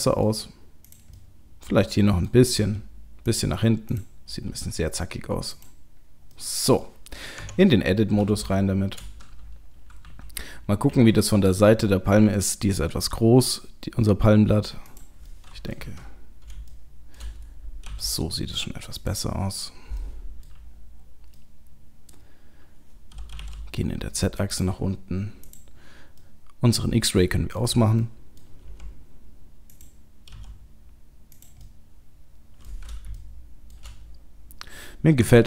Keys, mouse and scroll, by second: 0.9 click, 1.2 middle click, 2.3 middle click, 2.6 g, 4.3 click, 4.3 g, 6.0-6.4 scroll down 3, 6.4 middle click, 7.4 Tab, 7.9-8.3 scroll up 3, 8.5 shift+middle click, 9.9 KP_3, 10.9 KP_1, 12.9 s, 15.3 middle click, 15.7 middle click, 15.8 KP_7, 16.7 shift+middle click, 17.9 g, 19.2-19.8 scroll up 3, 19.8 scroll up 1, 20.0 middle click, 20.7-21.3 scroll down 2, 21.3 middle click, 21.3 scroll down 1, 23.3 g, 25.4 click, 26.3 middle click, 28.0 middle click, 29.0 r, 30.3 g, 31.6 middle click, 33.2 shift+middle click, 34.0 scroll up 2, 35.2 Tab.